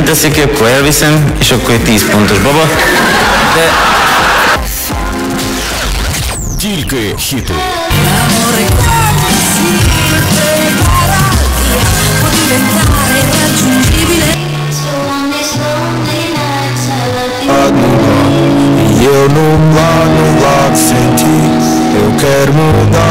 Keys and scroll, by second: 4.6 Page_Down, 14.3 Page_Down.